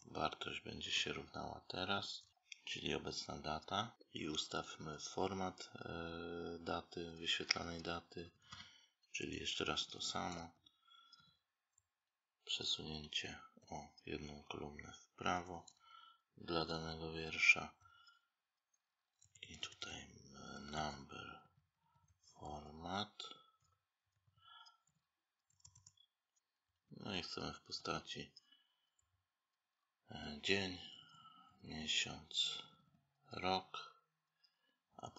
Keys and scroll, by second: 15.4 space, 25.4 space, 25.6 space, 34.9 space.